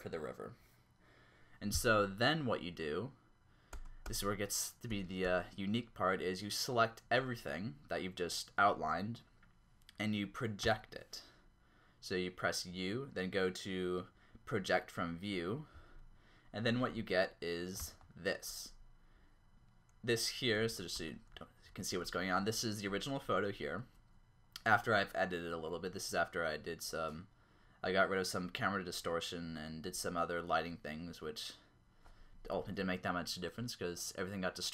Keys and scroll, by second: 3.8 Tab, 4.0 Tab, 4.9 a, 5.2 a, 10.6 u, 17.8 ctrl+Up, 20.7 ctrl+Up, 21.1 Tab, 21.8 ctrl+Up.